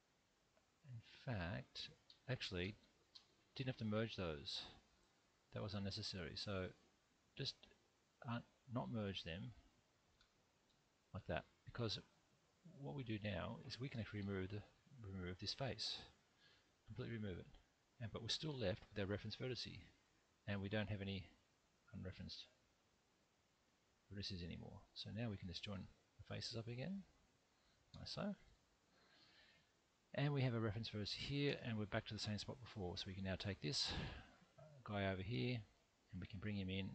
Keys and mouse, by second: 2.1 ctrl+z, 2.6 ctrl+z, 3.1 ctrl+z, 3.7 ctrl+z, 4.5 ctrl+z, 5.3 middle click, 7.0 click, 7.5 shift+click, 10.7 f, 11.2 middle click, 14.1 3, 16.4 x, 18.4 1, 20.3 click, 21.6 click, 22.6-23.6 middle drag, 25.3 shift+click, 26.1 shift+click, 26.7 shift+click, 27.5 shift+click, 28.4 f, 28.8 click, 29.2 middle click, 30.7 click, 31.5 `.